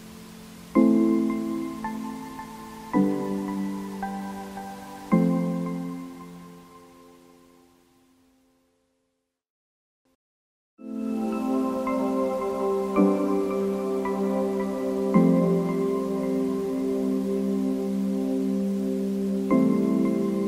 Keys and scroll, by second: 0.2 w.